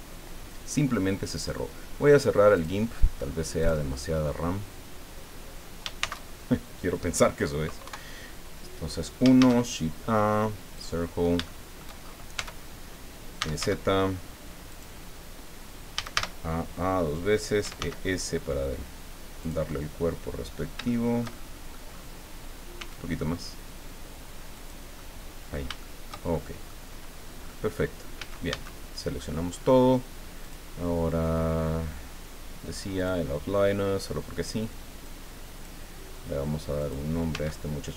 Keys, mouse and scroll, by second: 1.3 click, 2.5 click, 3.6 click, 6.0 shift+c, 7.8 KP_1, 9.3 shift+a, 10.7 click, 11.4 shift+click, 12.3 Tab, 13.1-14.1 typing, 14.7 click, 15.9 a, 17.4-18.3 typing, 19.4-20.7 drag, 19.7-20.7 right drag, 20.8-21.9 shift+middle drag, 21.9 shift+scroll up 1, 22.7 s, 24.5 click, 24.9 click, 25.8 shift+click, 26.6 click, 27.4-27.7 scroll up 2, 28.1 a, 30.4 click, 32.9 click, 35.0 click, 36.8 click, 37.3 Tab.